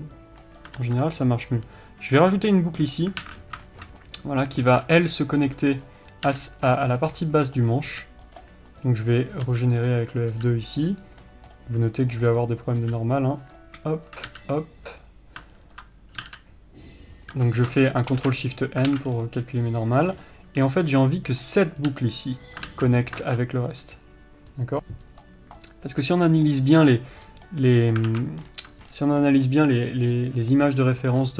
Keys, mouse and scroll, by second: 1.1 ctrl+r, 3.5 alt+a, 3.7 scroll up 1, 6.1 click, 6.6 f, 7.5 right click, 7.9 click, 8.3 f, 9.0 click, 9.8 f, 10.3 click, 10.7 f, 11.0 click, 11.5 middle click, 12.3 click, 12.5 middle click, 12.9 click, 13.2 f, 13.8 click, 14.6 f, 15.2 click, 16.0 ctrl+click, 16.5 g, 17.6 a, 18.4 ctrl+shift+n, 19.2 alt+a, 19.4 scroll down 1, 19.5-21.1 middle drag, 20.4-21.1 scroll up 1, 21.1 click, 21.4-23.0 middle drag, 22.2 f, 23.0 ctrl+z, 26.5 click, 26.8-31.3 middle drag, 27.6 scroll up 1, 28.3 scroll up 1, 28.4-29.3 scroll down 2, 28.5 alt+a.